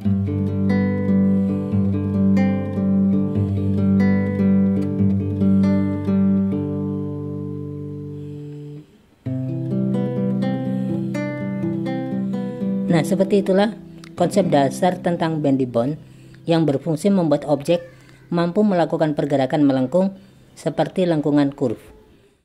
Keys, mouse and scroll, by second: 0.2-1.7 drag, 2.0 click, 2.1 click, 2.6 click, 3.4 click, 4.1 drag, 4.5 click, 5.3 drag, 6.1 click, 6.3 click, 9.1 drag, 9.7 click, 10.3 click, 10.5 click, 11.2 click, 15.3 click, 19.7 click, 19.9 click.